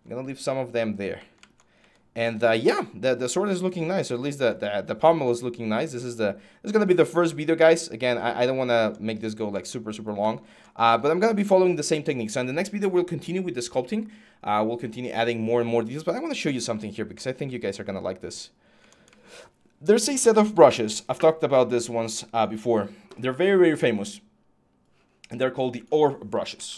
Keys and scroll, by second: 26.1-26.7 typing.